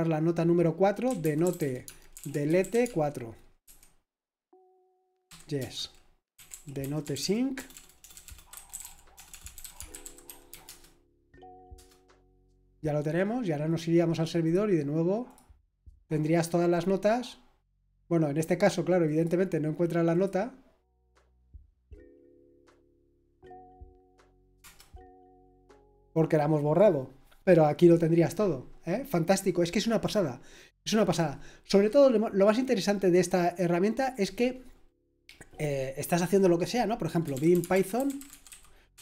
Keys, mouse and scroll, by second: 0.8-4.1 typing, 5.6-11.7 typing, 14.4 click, 14.8 click, 15.2 click, 17.8 click, 20.1 click, 23.0 click, 23.7 click, 24.6 typing, 26.1 typing, 33.4 click, 34.1 click, 37.0-39.0 typing.